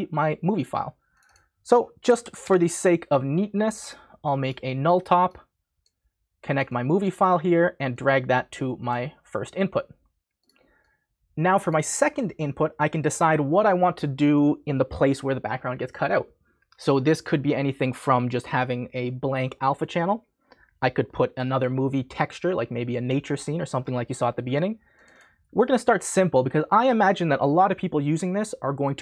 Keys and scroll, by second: 1.8-2.9 typing.